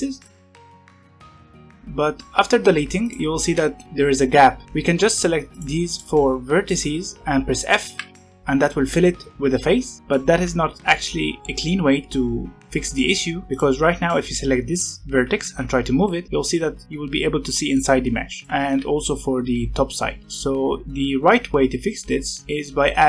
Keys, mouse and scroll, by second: 0.2 click, 0.3 x, 0.7 click, 0.7 x, 1.0 click, 1.1 x, 1.5 1, 2.9 click, 3.4 g, 5.5 shift+click, 5.9 shift+click, 6.6 shift+click, 8.0 f, 13.5 click, 15.4 g, 18.4 click, 18.6 g.